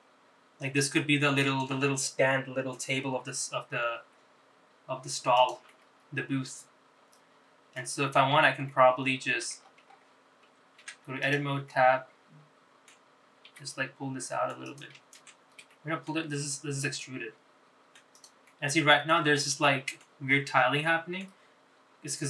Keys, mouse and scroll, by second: 5.1 r, 6.8-9.0 middle drag, 9.2-9.8 scroll down 3, 9.8 middle click, 10.8-11.1 scroll up 3, 12.0 Tab, 12.4 click, 12.8-14.0 middle drag, 14.6 g, 16.1 ctrl+z, 16.5 scroll down 1, 16.8 shift+middle click, 17.8 e, 19.6 middle click, 20.5 scroll up 2, 20.8 shift+middle click, 22.0 middle click.